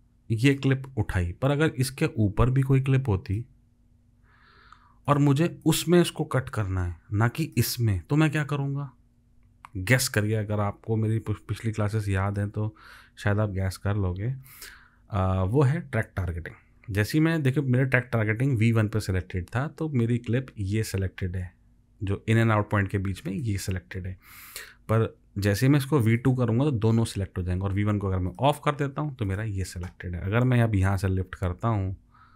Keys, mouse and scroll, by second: 2.9 alt+click.